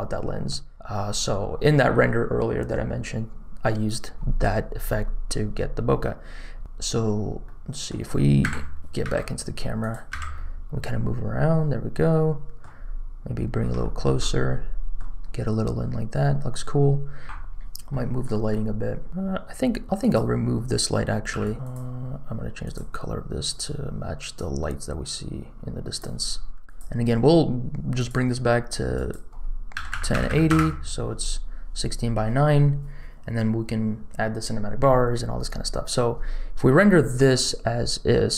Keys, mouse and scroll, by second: 6.0-6.4 scroll up 1, 6.4-7.4 scroll down 2, 7.4 middle click, 8.4 KP_0, 9.0 n, 9.8 click, 10.1 n, 10.3-12.6 middle drag, 12.9 scroll up 2, 13.8 shift+middle click, 14.1 middle click, 15.7 scroll down 1, 17.4 click, 17.4 KP_0, 17.9 middle click, 18.3 middle click, 19.1 g, 21.2 x, 21.5 r, 21.5 g, 22.6 click, 23.4 click, 26.6 click, 27.9 click, 28.9-30.6 drag.